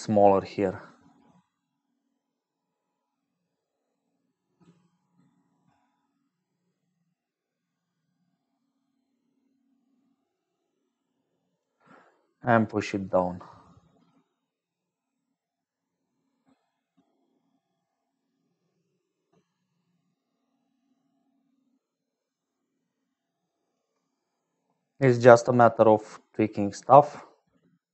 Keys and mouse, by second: 0.0-12.0 shift+drag, 13.6-23.9 shift+drag, 25.9-27.9 shift+drag.